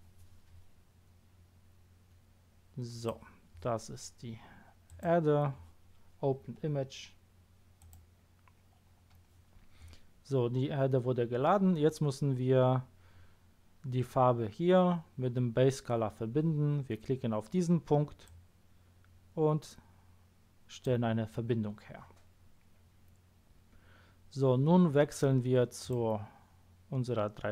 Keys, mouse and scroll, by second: 4.8 click, 7.8 click, 18.2-19.2 drag, 25.8 click.